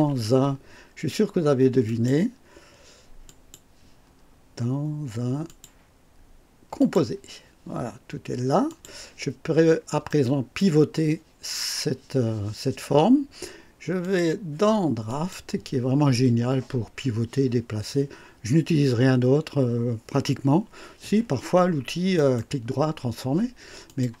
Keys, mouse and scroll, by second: 1.9 click, 3.2 click, 5.5 click, 6.8 click, 8.7 click, 9.5 scroll down 1, 10.1-10.8 right drag, 14.0 click, 15.1 click, 22.2 right click, 23.9 click.